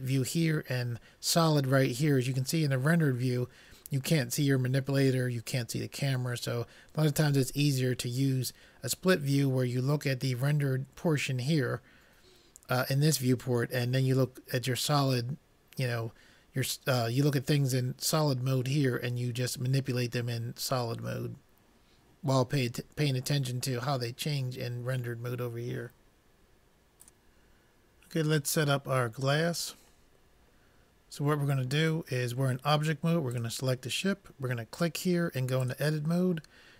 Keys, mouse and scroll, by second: 30.1-32.1 middle drag, 33.3-36.5 drag.